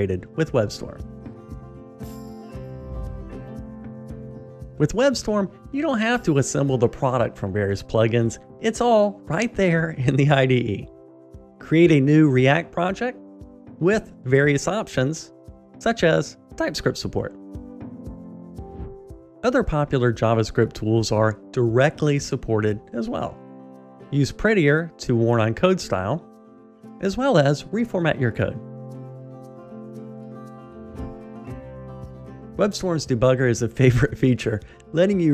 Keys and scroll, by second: 20.1 shift+super+a, 27.6 alt+super+l.